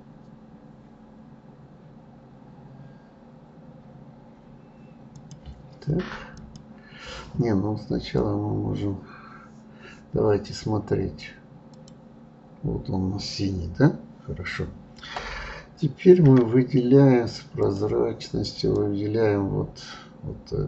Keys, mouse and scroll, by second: 5.1 click, 6.3-7.3 drag, 11.7 click, 17.6 click, 18.7-20.6 drag.